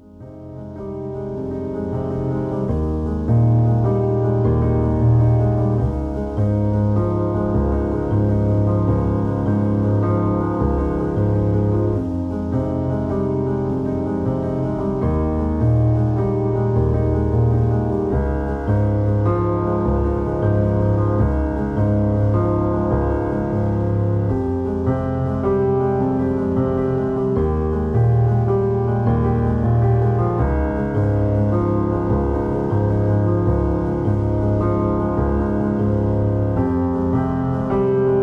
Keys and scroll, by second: 29.9 ctrl+j, 31.5 ctrl+t, 34.7 ctrl+z.